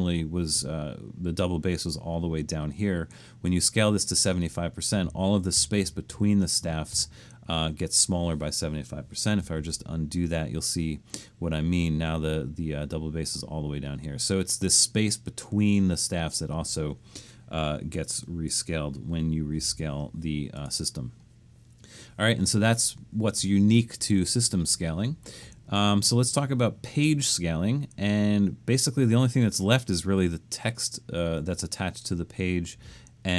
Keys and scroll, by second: 9.6 super+z, 19.3-20.2 typing.